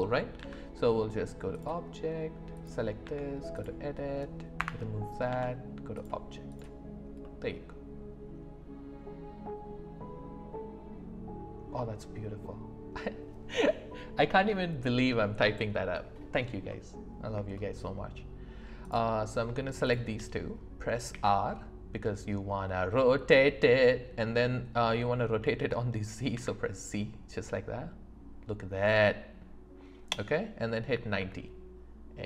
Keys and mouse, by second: 0.4 Tab, 2.5 click, 4.6 BackSpace, 5.3 Tab, 7.2-11.7 middle drag, 16.7 middle click, 17.5 shift+middle click, 18.8 click, 21.1 r, 26.3 z, 30.9 KP_9.